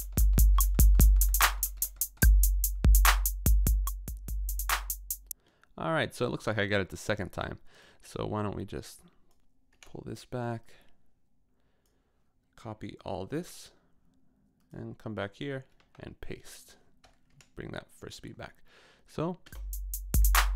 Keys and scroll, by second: 5.3 space, 9.8 BackSpace, 13.3 super+c, 15.7 super+v, 17.4 Left, 19.5 space.